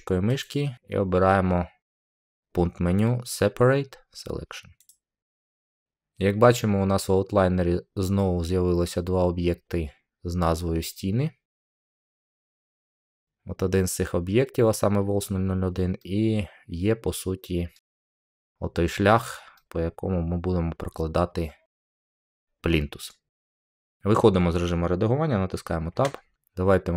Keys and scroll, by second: 25.8 Tab.